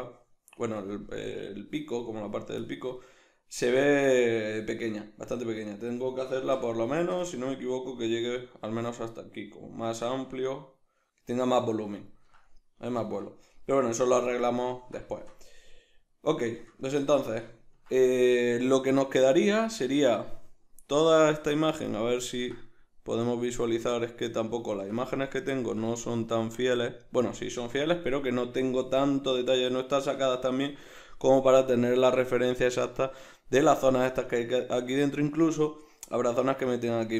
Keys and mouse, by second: 6.4 alt+q.